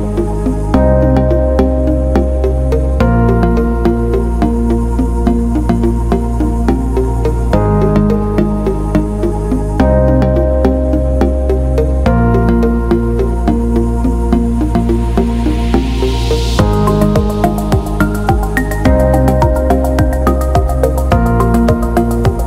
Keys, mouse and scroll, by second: 3.4 click, 6.2 click, 11.3-15.2 typing, 17.2-22.4 typing.